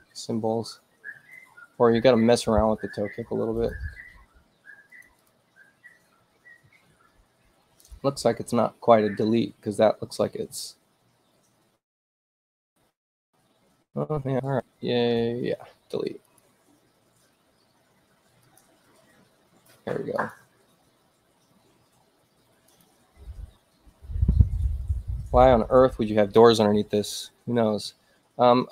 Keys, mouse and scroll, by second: 3.6 click, 4.9 click, 5.2 click, 17.6 click, 19.5 click, 22.4 click.